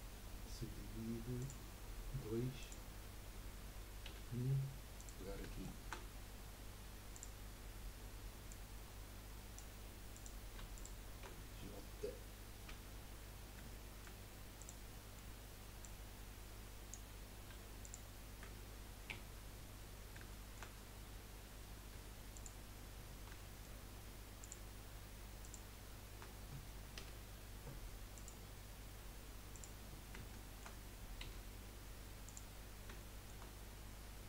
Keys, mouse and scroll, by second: 1.4-4.1 drag, 4.1 1, 4.9 click, 5.4-7.1 shift+middle drag, 7.1-8.6 drag, 10.1 click, 10.7 shift+click, 12.7 j, 13.8 shift+middle click, 14.6 click, 14.9 middle click, 15.8 click, 17.8 shift+click, 19.1 j, 20.3-21.9 shift+middle drag, 21.9 2, 22.3 click, 23.4-24.4 shift+middle drag, 24.4 shift+click, 25.4 shift+click, 27.0 F3, 29.5 click, 30.2 shift+middle click, 31.2 1, 32.2 click, 32.7 scroll up 2, 32.9-34.2 shift+middle drag.